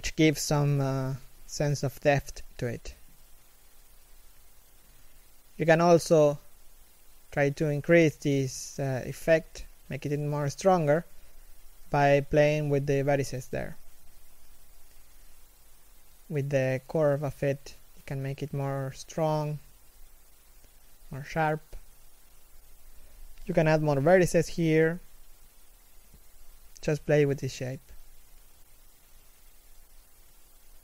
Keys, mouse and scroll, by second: 1.7 o, 4.9 scroll up 1, 5.5 alt+right click, 5.9 g, 8.1 scroll down 1, 9.1 alt+right click, 9.4 g, 12.0 z, 12.3 middle click, 18.3 middle click, 20.4 alt+right click, 20.8 alt+middle click, 21.4 scroll up 1, 23.3 middle click, 24.6 g, 27.1 z, 27.6 middle click, 28.1 z, 28.4-28.8 scroll down 1, 28.8 middle click.